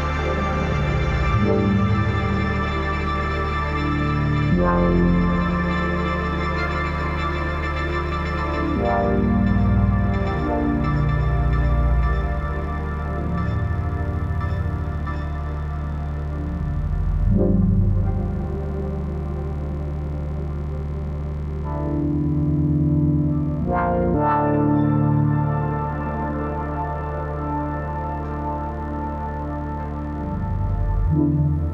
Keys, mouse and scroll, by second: 0.1 click, 1.0 g, 1.3 click, 1.4 space, 1.5 click, 1.7 space, 2.0-3.7 drag, 5.1 click, 9.2 ctrl+y, 10.0 ctrl+=, 10.6 space, 10.8 click, 10.9 space, 12.0 shift+click, 12.4 space, 12.5 click, 12.7 space, 14.6 shift+click, 16.3 space, 16.4 click, 16.5 space, 17.3 click, 18.5 ctrl+y, 18.8 space, 18.9 click, 19.5 ctrl+-, 20.2 space, 20.3 click, 20.4 space, 21.7 click, 23.4 space, 23.4 click, 24.2-26.0 drag, 26.0 ctrl+shift+], 26.6 click, 27.1 ctrl+=, 28.0 space, 28.2 click, 28.3 space, 29.7-31.7 drag.